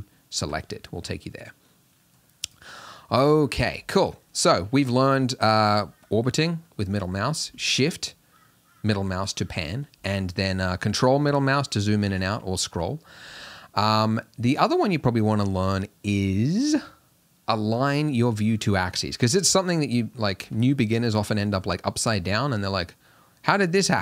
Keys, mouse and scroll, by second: 1.1-2.5 middle drag, 2.5 click, 3.1-3.7 middle drag, 3.7-5.4 scroll down 10, 5.4-12.3 ctrl+middle drag, 12.3 scroll up 2, 12.5 scroll down 1, 12.7 scroll up 2, 12.9 scroll down 2, 13.0-14.0 scroll up 2, 14.0-24.0 middle drag.